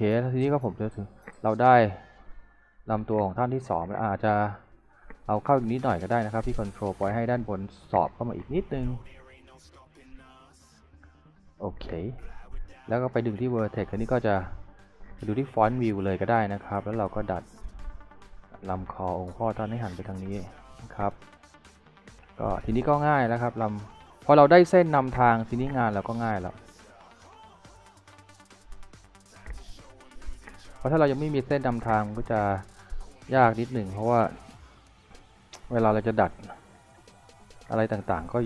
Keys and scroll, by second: 9.0-10.0 typing, 13.6 w, 14.7-15.6 typing, 22.1 w, 33.8-34.7 typing.